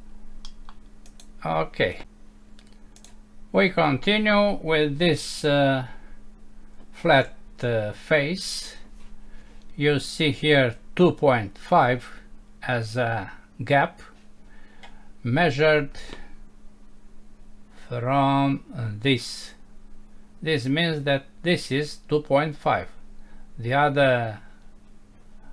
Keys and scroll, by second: 0.5 Home.